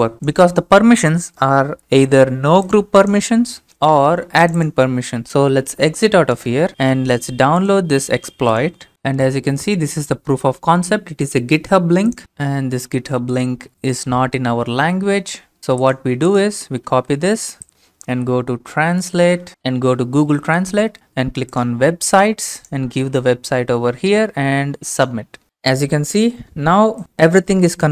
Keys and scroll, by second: 5.4-6.8 typing, 16.9 ctrl+c, 17.7-19.8 typing, 23.0 ctrl+v.